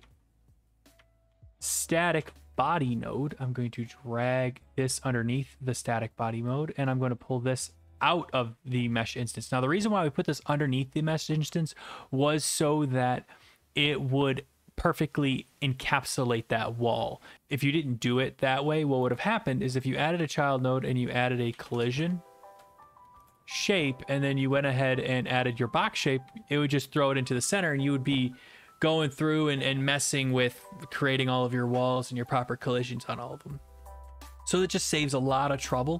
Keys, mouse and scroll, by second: 0.0-1.9 typing, 2.2 Return, 4.6 click, 7.2 click, 19.2 right click, 19.8 click, 21.2-22.4 typing, 23.2 Down, 23.2 Return, 24.6 click, 25.3 click, 25.4-26.8 typing, 26.8 right click, 30.3 right click, 32.4 right click, 35.7 click.